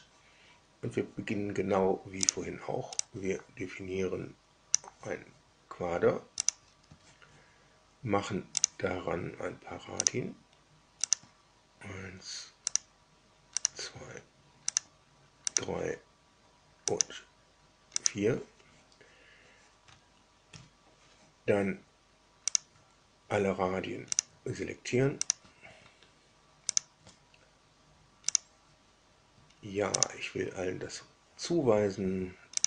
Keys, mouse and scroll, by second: 2.2 click, 2.9-4.9 drag, 6.4 click, 8.5 click, 9.9 click, 11.0 click, 12.6 click, 13.5 click, 14.6 click, 15.5 click, 16.9 click, 17.9 click, 20.5 Escape, 22.5 click, 24.1 ctrl+drag, 25.2 ctrl+drag, 26.6 ctrl+click, 28.2 click, 29.9 click, 32.5 click.